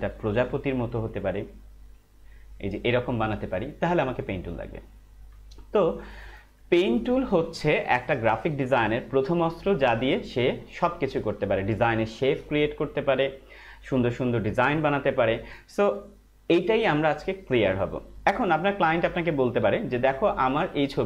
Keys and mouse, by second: 0.6 Right, 16.5 Left.